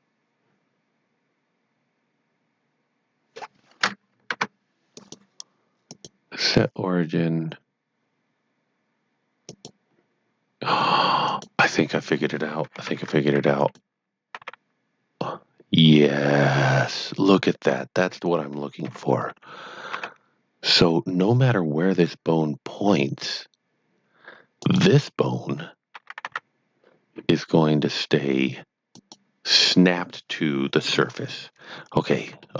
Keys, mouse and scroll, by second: 4.9 shift+click, 5.8 shift+click, 9.5 shift+click, 13.5 shift+click, 14.4 shift+r, 18.1 right click, 18.8 shift+KP_3, 19.9 shift+g, 24.5 shift+g, 24.7 shift+right click, 26.2 shift+r, 29.0 shift+right click, 30.8 shift+KP_1, 31.6 shift+scroll down 1, 32.4 shift+middle click.